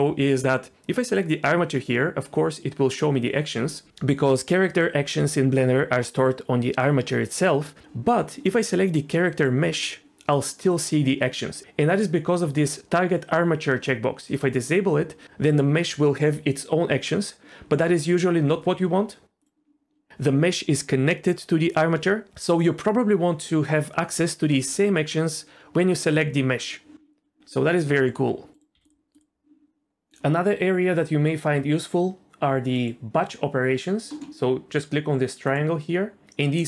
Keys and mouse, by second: 1.1 click, 9.3 click, 14.3 click, 19.4-28.6 drag, 28.7 x, 32.8-34.2 drag, 35.5-36.6 drag.